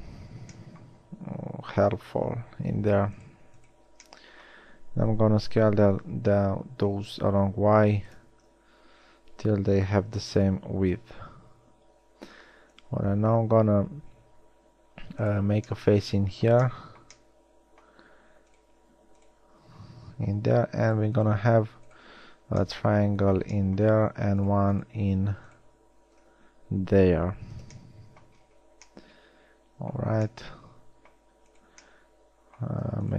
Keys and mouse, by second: 5.3 s, 16.7 shift+middle drag, 17.1 middle click, 17.3 middle click, 17.5 middle click, 18.6-19.3 right drag, 20.4 f, 22.3 f, 22.8 middle click, 26.0 f, 27.4 a, 30.9 middle drag, 31.9-33.1 middle drag.